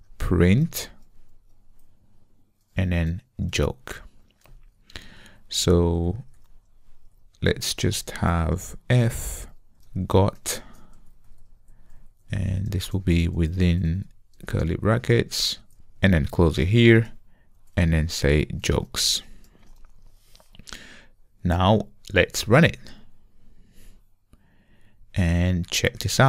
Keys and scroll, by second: 1.4 Return, 23.5 ctrl+r.